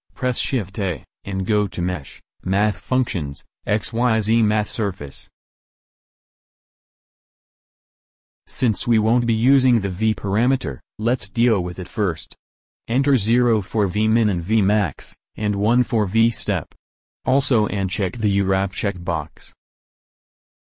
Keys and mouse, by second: 0.7 shift+a, 5.4 click, 11.3-13.2 drag, 14.3-20.0 drag.